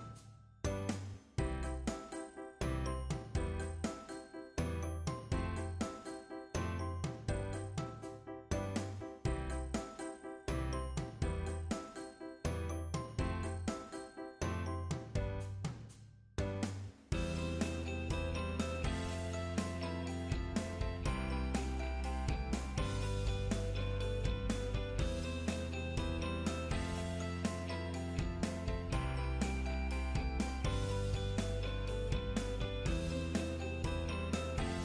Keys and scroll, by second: 2.3-2.7 scroll down 1, 2.9 scroll down 1, 3.3 scroll up 1, 20.4-21.2 scroll down 1, 21.7 scroll up 1, 31.6 scroll down 1, 31.7-32.3 scroll up 1.